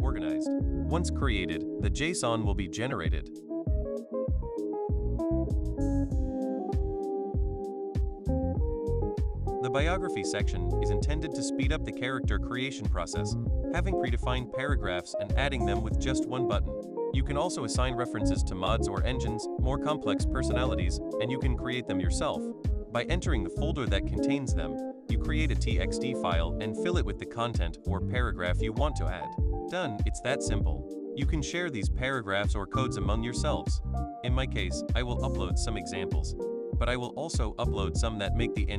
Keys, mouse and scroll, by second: 6.2 click, 6.8 click, 7.5 click, 8.3 click, 9.6-11.9 drag, 13.5 click, 18.3 click, 20.0-21.4 drag, 21.6 click, 24.2 click, 25.3 click, 26.8 click, 30.4 click, 32.2 click, 34.0 click, 34.3 click, 34.5 click, 34.9 click, 37.5 click, 37.9 click, 38.3 click.